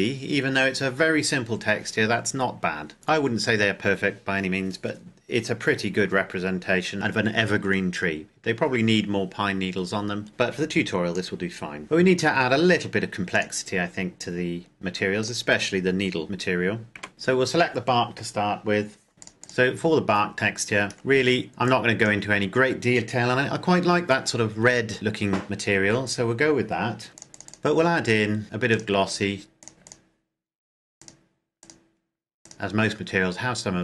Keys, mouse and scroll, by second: 2.2 scroll down 1, 3.1 scroll down 1, 6.9-8.3 scroll down 1, 8.3-10.0 scroll up 1, 10.3 click, 11.8-12.2 scroll up 1, 13.3 click, 16.9 n, 17.1 right click, 19.3 click, 19.8-20.3 scroll up 1, 20.9-21.5 scroll down 1, 21.5 click, 24.1-24.4 scroll down 1, 27.1 click.